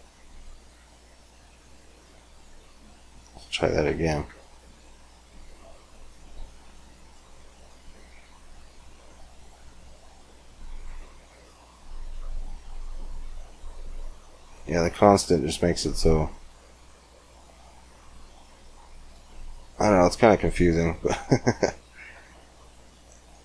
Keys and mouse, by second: 1.1 middle click, 1.9-4.7 drag, 4.7-6.1 middle drag, 6.1-18.5 drag, 18.5-19.7 middle drag, 19.7-23.4 drag.